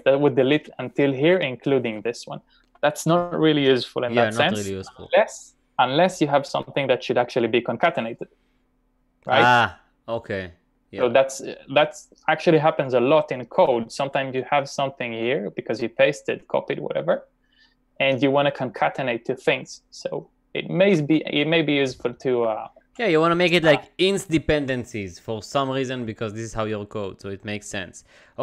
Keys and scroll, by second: 14.1 typing, 19.5 f, 20.0 b, 22.2-26.2 typing.